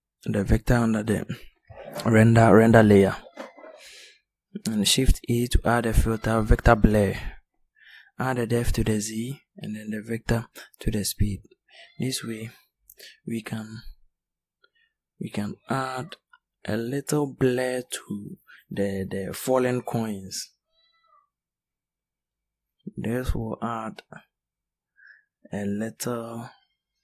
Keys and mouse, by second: 3.4 shift+a, 14.2 middle click, 17.0-17.8 middle drag, 23.4-25.3 middle drag.